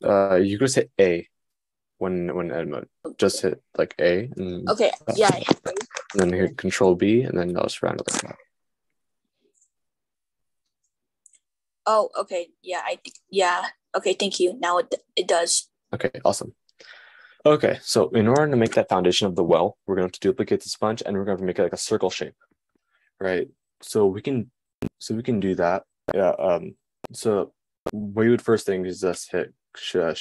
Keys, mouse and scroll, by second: 1.4 a, 6.3 super+b, 8.1 Tab, 29.7 shift+d.